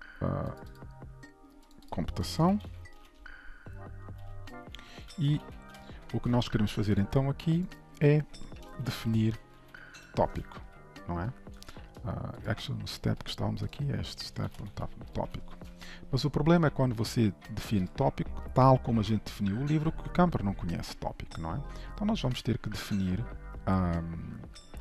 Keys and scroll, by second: 6.3 ctrl+s, 10.7 ctrl+shift+Left, 12.5 ctrl+b, 15.6 ctrl+s.